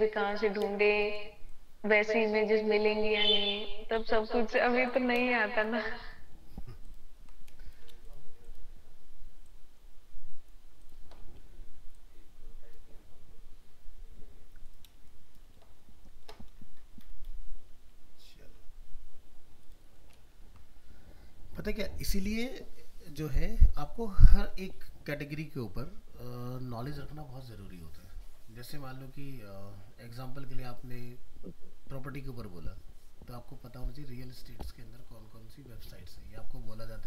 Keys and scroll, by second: 5.9 ctrl+space, 20.3 ctrl+-.